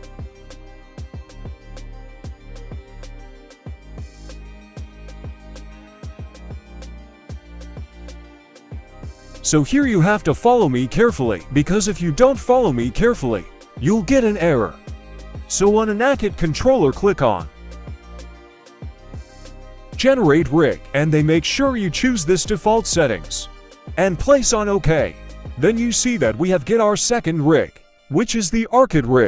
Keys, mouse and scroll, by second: 0.3-2.4 drag, 2.8 click, 3.4-5.4 scroll up 1, 5.8 alt+h, 6.8 right click, 7.1-7.8 middle drag, 8.7 middle click, 9.3 middle click, 12.0 click, 12.9-13.6 middle drag, 14.3 right click, 15.9-17.3 drag, 19.4-24.2 drag, 24.2-25.0 scroll down 2, 24.5-25.0 middle drag, 25.4 right click, 26.0-26.8 middle drag, 27.3 m, 28.0 m, 28.4 m, 28.6 middle click.